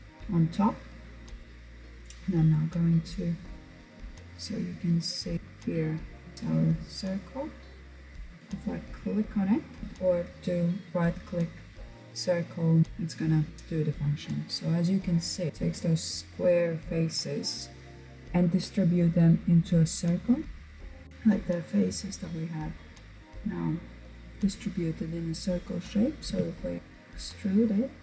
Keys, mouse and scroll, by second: 1.2 click, 8.2-9.8 drag, 9.8-20.4 right drag, 20.4 click, 21.3-21.8 scroll down 3, 21.8-25.2 middle drag, 25.3 e, 26.8-27.1 scroll down 3, 27.1-28.0 middle drag.